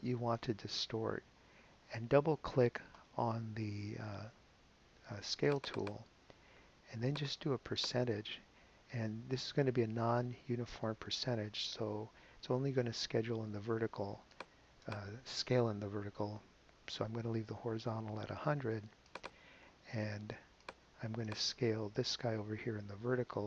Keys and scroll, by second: 16.5 |, 16.9 0.